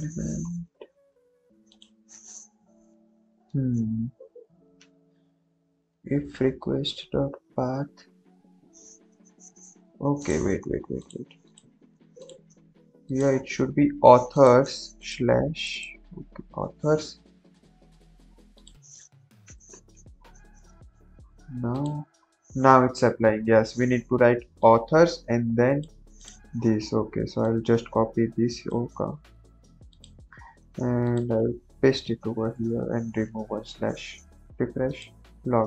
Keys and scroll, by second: 19.5 ctrl+v, 19.9 ctrl+s, 28.7 ctrl+c, 31.4 ctrl+v, 32.4 BackSpace, 32.7 ctrl+s.